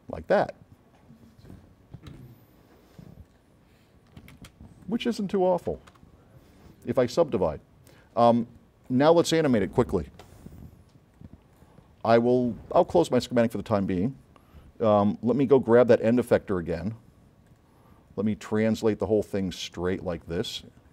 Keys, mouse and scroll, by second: 2.2 right click, 2.2 s, 3.3 middle click, 3.9 scroll up 1, 4.4 space, 5.9 KP_Add, 8.5-9.0 drag, 11.2-11.8 drag, 12.9 click, 13.8 click, 15.8 click, 17.6 click, 18.4-20.6 drag.